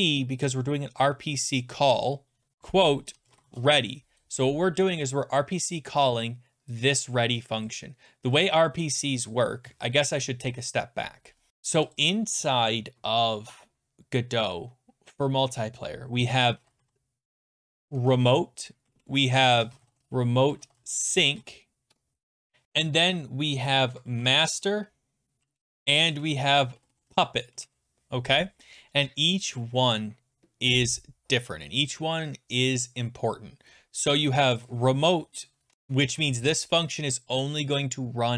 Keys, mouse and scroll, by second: 0.0-0.2 typing, 2.3-4.0 typing, 7.7 click, 9.5 click, 11.9 click, 12.1 click, 16.1-21.8 typing, 21.9 Tab, 22.6 click, 23.1 click, 23.2 click, 23.5-27.5 typing, 34.6 click, 34.7 click, 35.7 typing, 36.9 click, 37.0 click.